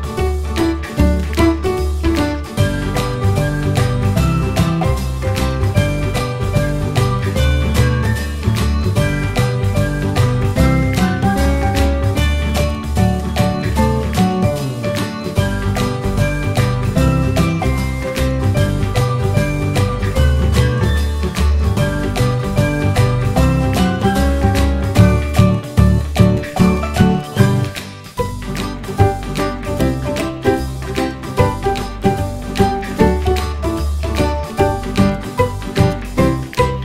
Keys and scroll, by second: 0.0 f, 6.1 Tab, 8.7 Tab, 10.2 3, 15.0 r, 22.5 ctrl+e, 22.6 r, 33.4 Return, 34.5 Return, 36.2 ctrl+z, 36.7 q.